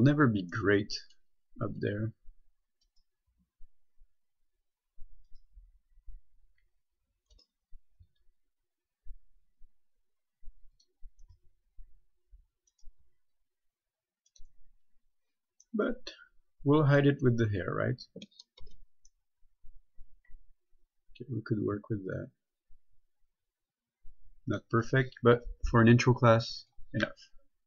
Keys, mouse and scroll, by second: 0.8 middle click, 1.6 scroll down 1, 3.1 right click, 3.6 g, 5.6 right click, 8.3 g, 11.0 click, 11.5 right click, 11.6 g, 13.0 right click, 13.3 g, 14.5 right click, 15.9 middle click, 17.5-17.8 scroll down 1, 18.8 Tab, 19.4 middle click, 26.9 click.